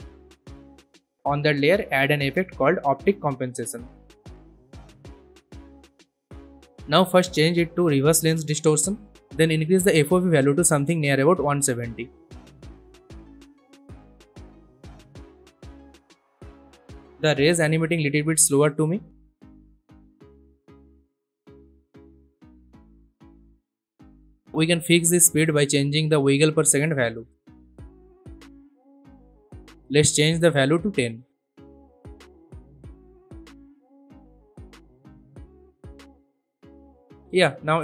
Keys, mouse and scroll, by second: 2.0-3.4 typing, 4.7-15.7 drag, 16.2 space, 18.0-19.7 drag, 28.6 click, 29.4 scroll down 1, 31.0 click, 31.9-32.9 typing, 34.4 scroll up 1, 35.4-37.3 drag.